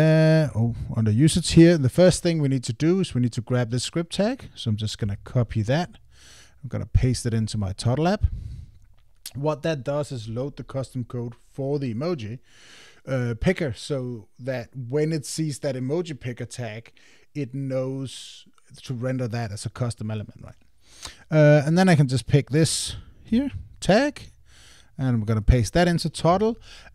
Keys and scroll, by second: 5.0 super+c, 7.4 super+v, 23.3 super+c, 25.5 super+v.